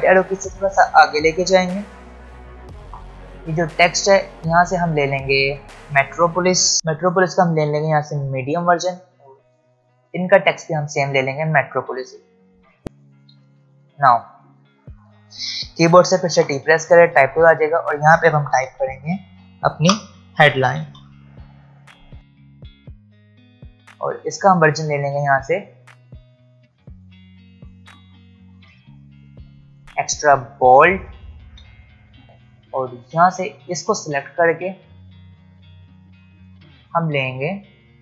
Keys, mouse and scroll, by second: 0.9 Right, 2.1 shift+Right, 3.1 click, 8.1 click, 12.8 click, 13.4 alt+scroll down 1, 13.7 space, 13.8 click, 14.7 space, 14.8 click, 16.4 t, 17.4 click, 19.8 Caps_Lock, 20.4 typing, 22.0-23.9 typing, 22.8 Left, 22.9 Return, 23.7 click, 24.4 click, 29.8 click, 31.1 space, 31.2 click, 35.2-36.4 scroll down 1, 36.4 click.